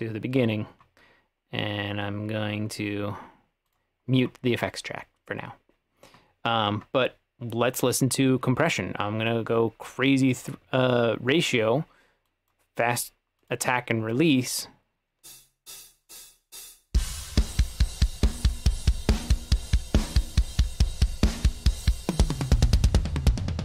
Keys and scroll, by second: 15.3 space.